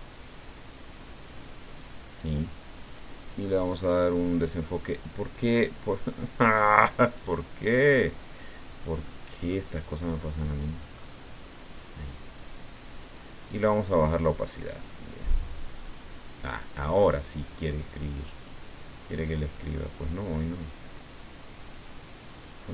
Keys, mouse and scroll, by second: 3.7 click, 7.1 click, 9.0-9.7 scroll down 4, 10.1 scroll up 2, 10.9-11.3 scroll up 2, 11.4 scroll up 2, 12.2 scroll down 2, 14.6 click, 16.7-18.6 drag, 18.9 click, 20.0-22.6 drag.